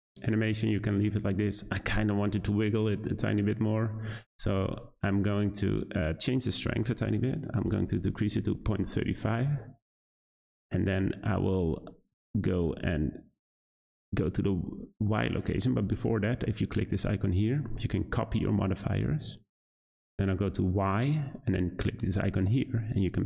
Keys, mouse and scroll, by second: 4.6 space, 5.8-9.0 drag, 9.4 space, 10.8 space, 13.5 click, 15.3 click, 18.3-20.0 drag, 22.4-23.2 drag.